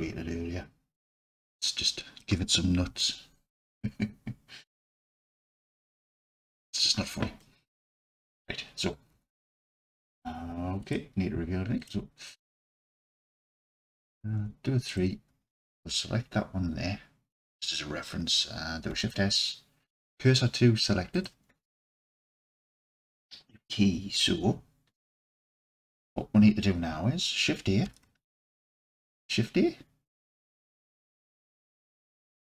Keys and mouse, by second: 1.8-2.2 drag, 3.1-5.3 alt+drag, 7.4 alt+click, 9.1 Tab, 9.8 Tab, 10.8 click, 11.8-12.3 drag, 12.3 Tab, 14.1 3, 14.9 click, 18.9 shift+s, 21.9 Tab, 27.8 shift+a, 31.0 shift+a.